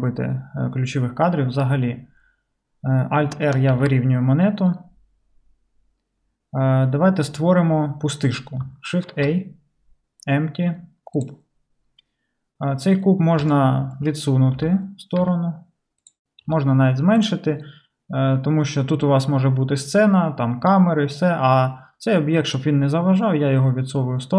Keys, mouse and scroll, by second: 3.7 alt+r, 9.1 shift+a, 14.6 g, 16.1-24.3 middle drag, 16.5 s.